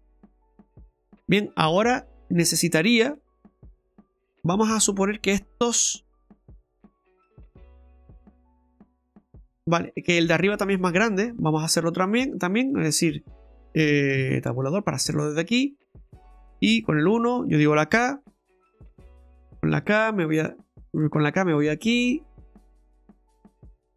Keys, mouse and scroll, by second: 0.1 right click, 0.4 scroll down 1, 0.6 middle click, 2.3-3.1 scroll up 5, 3.1 middle click, 10.4 right click, 11.3 Tab, 11.9 right click, 12.7 middle click, 14.8 scroll up 2, 15.1 shift+middle click, 15.8 middle click, 16.3 shift+middle click, 17.0 KP_1, 19.7 j, 21.1 k.